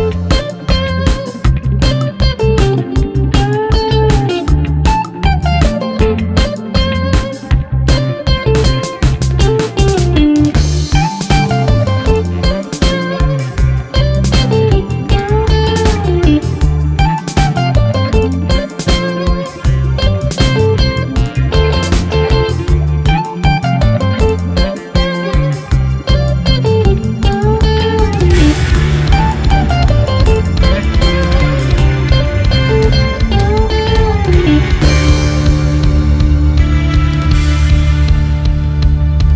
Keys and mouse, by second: 1.6 shift+d, 3.5 r, 6.8-7.2 shift+middle drag, 7.5-8.0 middle drag, 8.3-9.0 middle drag, 9.5 middle click, 10.1-10.7 middle drag, 11.0 shift+middle click, 12.1 shift+d, 13.1 r, 16.3 shift+middle drag, 17.1-19.5 middle drag, 19.8-20.1 middle drag, 20.3 shift+middle drag, 20.9-24.4 middle drag, 25.0-25.5 middle drag, 25.9-26.5 shift+middle drag, 26.7-32.2 middle drag.